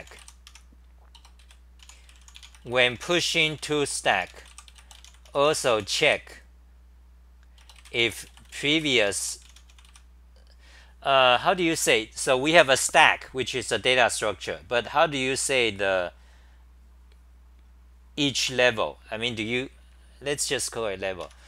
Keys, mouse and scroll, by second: 0.5 Home, 1.1 Return, 1.4 ;, 1.8 u, 21.2 Home.